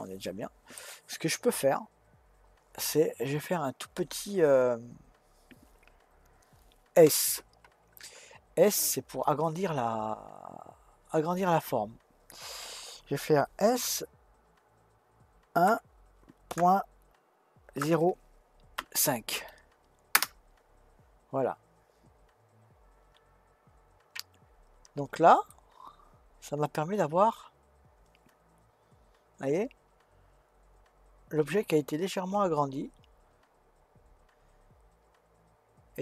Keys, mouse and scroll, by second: 6.9 s, 25.5-28.5 middle drag.